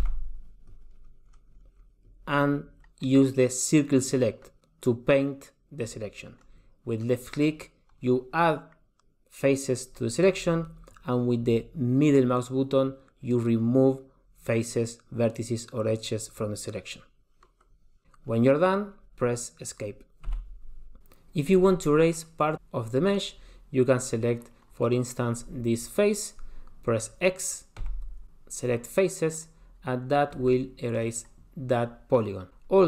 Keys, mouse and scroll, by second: 0.2 c, 21.0 super+z, 21.0 click, 25.0 click, 28.0 x, 30.7 middle click.